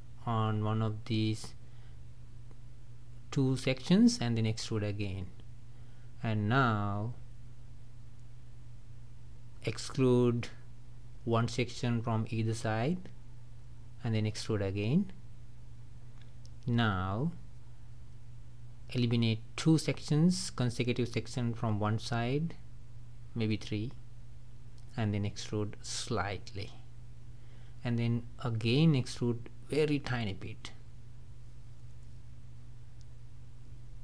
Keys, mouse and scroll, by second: 0.0 shift+click, 0.6 shift+click, 1.5 shift+click, 2.3 shift+click, 2.7-4.0 middle drag, 4.0 e, 5.6-9.8 middle drag, 9.8 shift+click, 10.1 shift+click, 11.3 shift+click, 12.4 shift+click, 13.0 shift+click, 13.6 shift+click, 14.9 e, 16.6-18.9 middle drag, 18.9 shift+click, 19.5 shift+click, 20.2 shift+click, 21.0 shift+click, 21.3 shift+click, 22.1 shift+click, 23.0 shift+click, 23.4 shift+click, 24.1 shift+click, 24.5 middle click, 25.3 scroll down 2, 26.5 e, 28.5 e, 29.8 click, 30.2-33.4 middle drag.